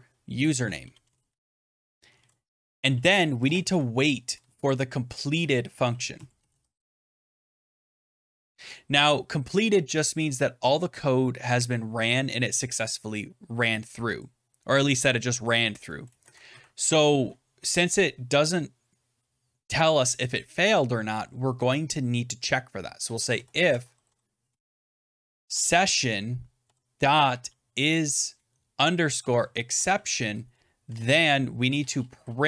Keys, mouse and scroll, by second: 0.2-4.1 typing, 5.2-8.2 typing, 12.6 click, 13.3 click, 14.1 click, 15.0 click, 15.8 Return, 16.0 Return, 16.7 Up, 16.7 Tab, 22.7-32.4 typing, 29.6 Tab.